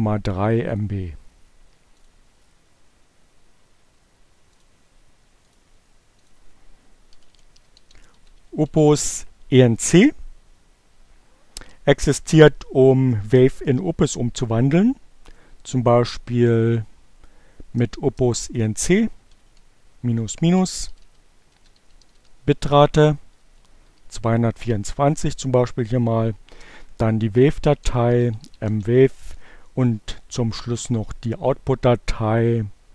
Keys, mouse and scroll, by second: 1.9 click, 4.1 click, 5.1 click, 6.1 click, 6.3-8.1 typing, 17.1 space, 17.2 -, 19.4-23.0 typing, 24.8 space, 26.9-28.3 typing, 32.1-32.9 typing.